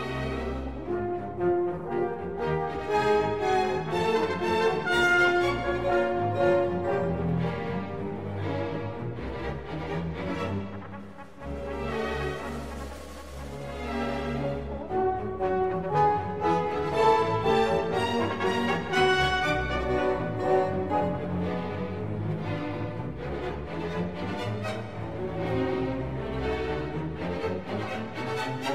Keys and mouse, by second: 0.2 click, 0.7-2.1 middle drag, 4.7 click, 6.1 click, 7.0-8.3 drag, 8.7 click, 11.3 ctrl+s, 13.0-15.5 typing, 13.7 Tab, 14.4 middle click, 15.3 right click, 16.7 a, 16.9 right click, 17.3 a, 17.6 middle click, 17.6 KP_1, 18.0 g, 18.9 Tab, 19.4 Tab, 19.7 Tab, 20.0 KP_0, 20.3 z, 20.7 ctrl+s, 25.0 z, 25.9 z, 26.9 shift+a, 28.6 ctrl+c.